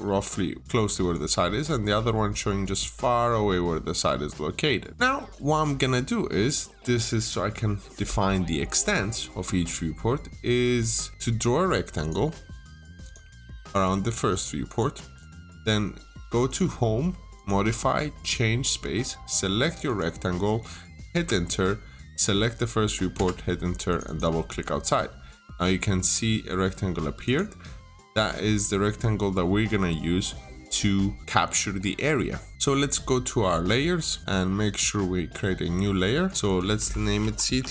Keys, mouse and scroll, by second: 0.1 scroll down 1, 0.6 middle click, 1.0 click, 1.3-2.0 scroll down 1, 2.0 middle click, 2.8 scroll down 1, 4.4-4.7 scroll up 1, 4.7 middle click, 4.9 scroll down 1, 4.9 middle click, 10.6 click, 15.0-15.5 scroll up 1, 16.3 click, 21.0 Return, 21.9 click, 23.0 Return, 23.7 click, 23.9 double click, 27.1 click, 27.9 scroll down 1, 28.5 middle click, 36.1 click, 36.8-37.7 typing.